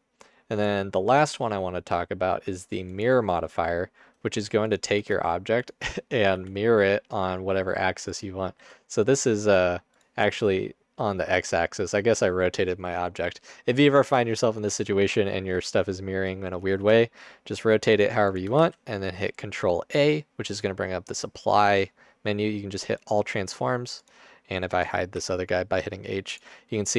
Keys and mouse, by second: 5.0 Tab, 6.5 r, 8.5 g, 10.1-12.6 drag, 16.9 r, 18.6 ctrl+a, 25.3 h.